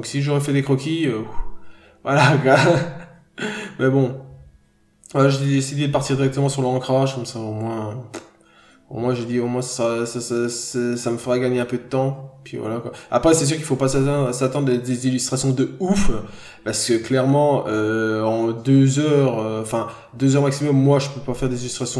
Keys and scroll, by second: 0.2 b, 3.5 ctrl+z, 4.4 n, 4.7-5.1 scroll up 1.